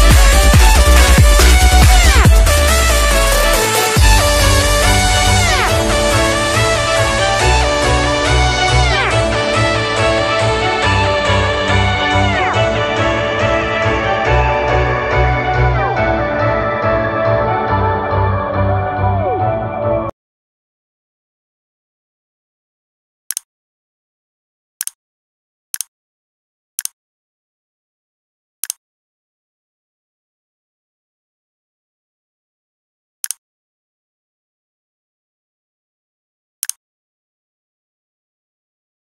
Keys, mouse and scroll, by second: 0.3 s, 1.0 click, 4.3 ctrl+s, 5.4 click, 6.1 Delete, 7.1 s, 8.6 s, 9.2 click, 15.2 ctrl+c, 15.6 click, 16.3 ctrl+v, 16.9 click.